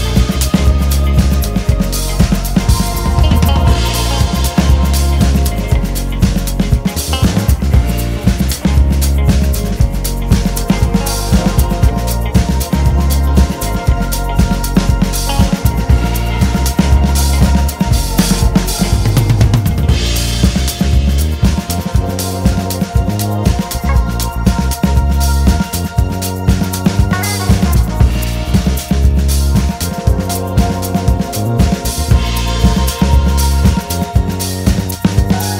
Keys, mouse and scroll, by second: 0.3 KP_7, 1.5 scroll up 1, 2.7 click, 3.8 e, 5.0 KP_1, 6.2 e, 8.5 KP_7, 8.8-11.7 scroll down 1, 11.7 KP_1, 15.7 alt+s, 16.9 shift+click, 19.1 KP_1, 19.6-20.0 scroll up 1, 21.1 1, 21.9 click, 22.3 g, 24.7 click, 26.0 g, 29.1 click, 30.5 Tab, 31.2 alt+click, 34.6 e.